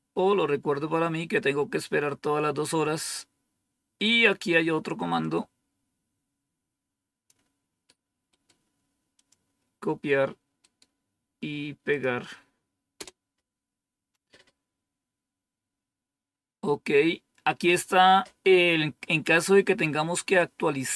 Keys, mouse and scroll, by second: 1.0 scroll down 2, 5.1-7.2 drag, 9.1 click, 11.8 click, 12.9 Return, 16.9-20.9 scroll down 2.